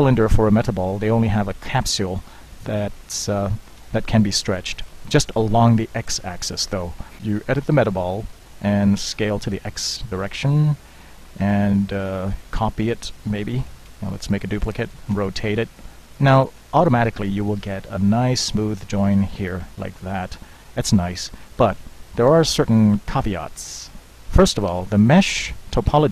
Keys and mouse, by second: 3.8 KP_1, 7.0 drag, 7.2 Escape, 7.2 Tab, 7.2 ctrl+z, 7.7 Tab, 9.1 s, 11.7 Tab, 12.8 shift+d, 14.9 r, 17.7 g, 22.3 KP_1, 23.2 middle click, 23.4 click, 24.8 Tab, 25.7 shift+z.